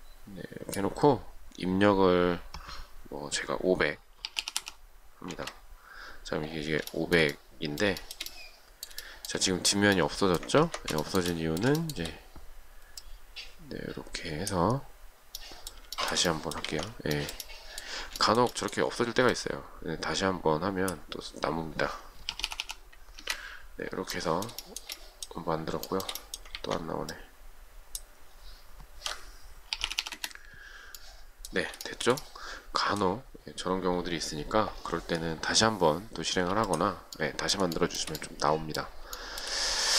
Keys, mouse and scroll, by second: 4.0-5.3 typing, 5.3 Return, 7.1 shift+middle click, 8.2 shift+middle click, 10.8 ctrl+z, 11.3 shift+middle click, 16.2 shift+middle click, 17.6 ctrl+z, 18.4 shift+middle click, 22.1-23.3 typing, 23.4 Return, 25.0 shift+middle click, 26.1 shift+middle click, 26.8 ctrl+z, 29.7-30.7 typing, 32.1 shift+middle click, 36.6 space, 38.0 shift+middle click, 39.4 shift+middle click.